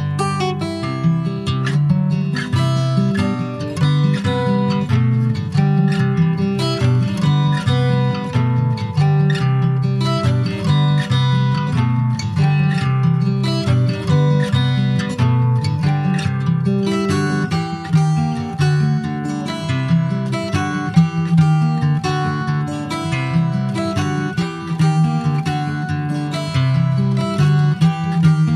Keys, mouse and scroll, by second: 0.1 alt+middle click, 0.8 ctrl+s, 1.3 click, 2.7 /, 3.2-3.7 scroll down 2, 3.7 scroll up 1, 3.9 alt+middle click, 4.7 alt+middle click, 5.9 click, 8.1 Tab, 8.4 middle click, 8.8 click, 9.9-13.0 right drag, 13.0 /, 13.6 middle click, 13.9 Tab, 14.2 click, 15.3 click, 16.4 ctrl+z, 16.9-18.7 middle drag, 18.7 e, 20.5 click, 21.0 middle click, 21.4 Tab, 21.5 scroll down 2, 21.7 middle click, 22.1 ctrl+s, 22.2 click, 22.6 middle click, 23.1 Tab, 23.5 click, 24.2 middle click, 24.8 shift+d, 25.7-28.5 middle drag.